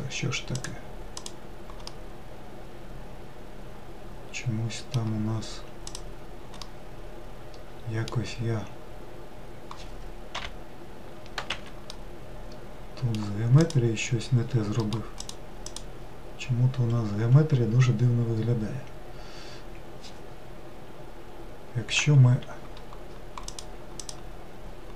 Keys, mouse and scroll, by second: 0.6 click, 1.3 click, 2.0-5.0 middle drag, 5.9 click, 6.6-9.9 middle drag, 10.4 ., 12.0-13.7 middle drag, 13.7 click, 14.8 middle click, 15.2 click, 15.7 click, 23.5 click, 24.1 click.